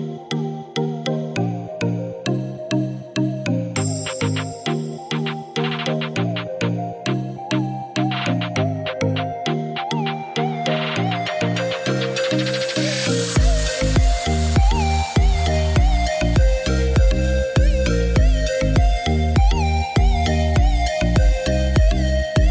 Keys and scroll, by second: 1.7-2.6 typing, 14.6 1, 15.0 4, 15.4 Return.